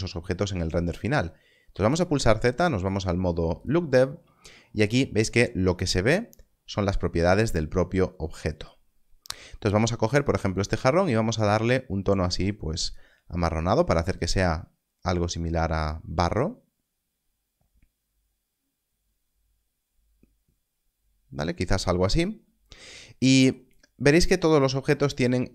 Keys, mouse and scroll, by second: 1.6 click, 10.1 click.